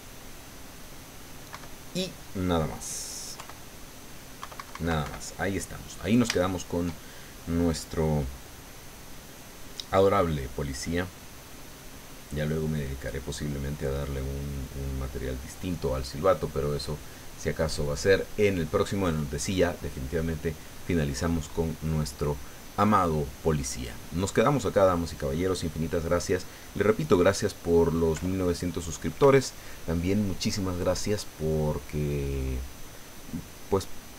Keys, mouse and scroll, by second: 1.5 KP_Subtract, 3.3 KP_1, 4.4 KP_Subtract, 5.2 click, 6.3 shift+click, 7.1-12.4 shift+drag, 12.5 click, 13.7 click, 15.9 click, 16.8 middle click, 16.9-18.8 middle drag.